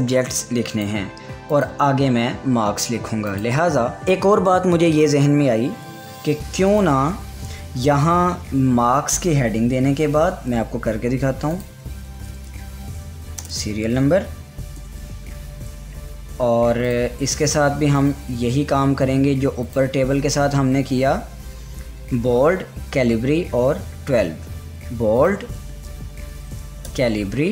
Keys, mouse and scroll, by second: 7.2 click, 12.1 click, 12.1 click, 12.7-15.3 typing, 17.4 click, 24.5 click, 26.4 c, 27.4 Return.